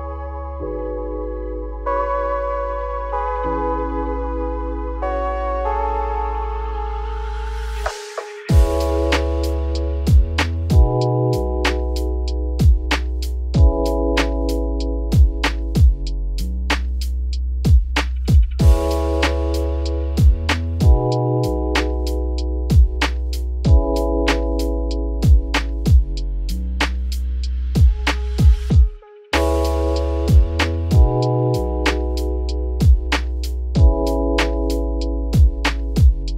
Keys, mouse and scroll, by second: 1.5-2.8 drag, 3.1 Tab, 3.4 scroll up 4, 3.6 a, 3.9 s, 4.5 r, 6.6 s, 9.1 scroll up 1, 9.3 s, 10.1 scroll down 1, 10.2 middle click, 10.7-11.0 scroll down 5, 11.0 middle click, 11.7-12.1 scroll up 1, 12.1 f, 12.4 middle click, 13.0 f, 15.5 ctrl+b, 18.5-19.0 scroll up 1, 19.0 g, 21.0 scroll down 1, 21.1 middle click, 21.4 Tab, 21.5 scroll down 2, 21.8 middle click, 22.3 scroll up 5, 22.5 scroll down 1, 22.6 middle click, 22.8-23.2 scroll up 3, 23.2 middle click, 23.5 Tab, 23.8 `, 24.1 z, 24.4-25.0 scroll up 2, 25.0 g, 26.3 z, 26.5 scroll down 1, 26.6 middle click, 27.3 a, 27.6 s, 28.6 Tab, 28.8-29.4 middle drag, 29.4-31.0 right drag, 31.0 click, 31.2 scroll down 2, 31.3 middle click, 32.0 click, 32.2 Tab, 32.4 `, 33.1-33.4 scroll down 4, 33.4-34.1 scroll up 4, 34.1-34.5 scroll down 2, 34.5 shift+d.